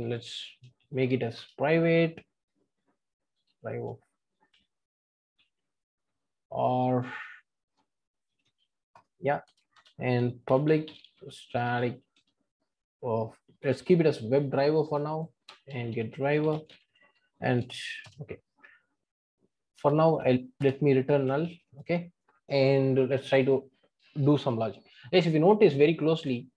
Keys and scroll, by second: 1.4 Return, 9.0 Return, 12.2 Return, 14.9 Return, 20.7 Return.